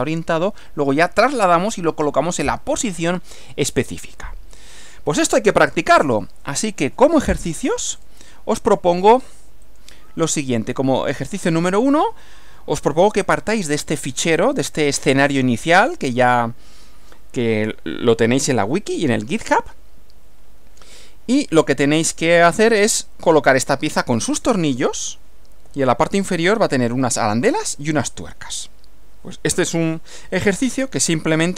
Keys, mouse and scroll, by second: 3.7-5.4 middle drag, 8.0 click, 9.7 click, 10.4 click, 21.5 Right, 25.7 Right, 30.7 Left.